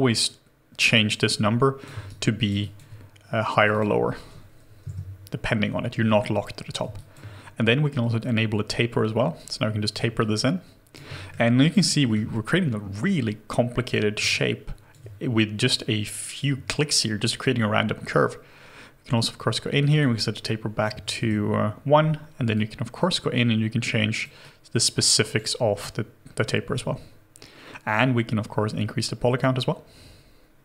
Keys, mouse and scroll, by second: 2.1 alt+right click, 2.6 alt+click, 3.7 double click, 4.8 Return, 10.2 alt+click, 11.6 alt+right click, 11.9 alt+middle click, 14.3 alt+click, 15.9 scroll, 15.9-18.0 scroll down 1, 19.9 double click, 21.2 Return, 27.9 scroll down 1.